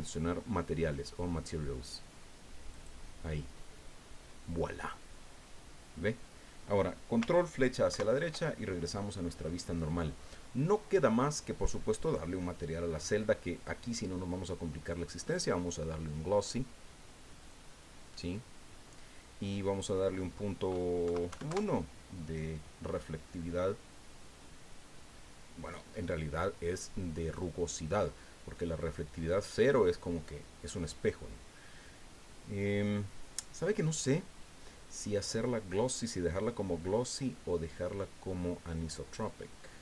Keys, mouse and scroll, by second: 2.7 click, 7.9 ctrl+Right, 12.0 right click, 13.5 click, 15.0 click, 17.4 click, 19.8 click, 21.1 KP_Decimal, 21.3 KP_1, 21.5 KP_Enter, 24.7-25.0 scroll down 2, 27.3-30.9 drag, 30.9-31.3 scroll up 2, 32.1 scroll down 2, 35.2 click, 37.3-37.7 scroll down 1, 39.2-39.8 scroll down 4.